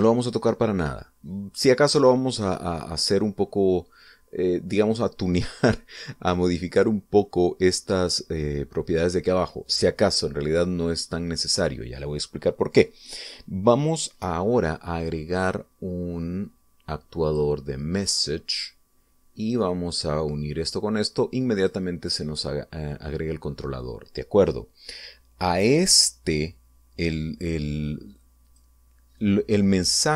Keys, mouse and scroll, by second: 12.3 click, 18.1 click, 20.3-22.7 drag, 29.3 click.